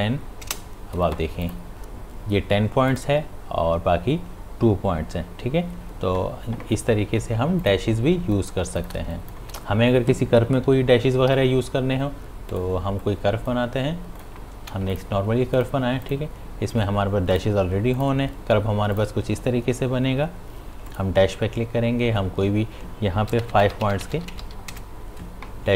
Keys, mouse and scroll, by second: 1.4 click, 7.6 click, 8.2 space, 8.3 click, 8.6 space, 8.8 ctrl+alt+click, 9.1 ctrl+click, 14.6 v, 14.9 click, 23.4 Tab.